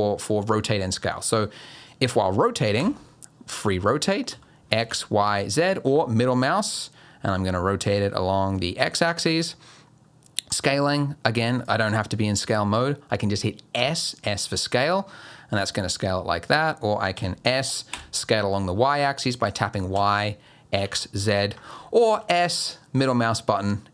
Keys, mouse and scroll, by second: 2.8 r, 10.5 click, 11.6 click, 13.8 s, 17.1 s, 22.1 s.